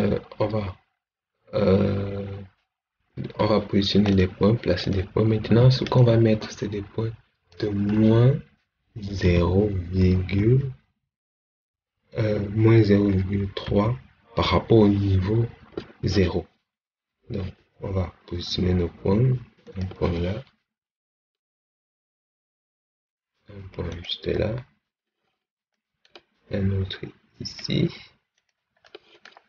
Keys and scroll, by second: 9.1 0, 10.0 ., 13.5 3.